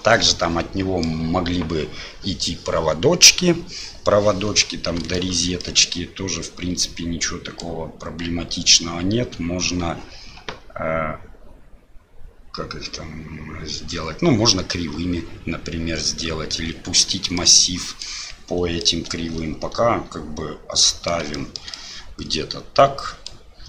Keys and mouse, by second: 0.3-1.2 middle drag, 5.2 shift+middle drag, 5.6-7.6 middle drag, 17.3-18.1 middle drag, 18.9-21.1 middle drag, 21.4 shift+middle click, 21.8-23.3 middle drag.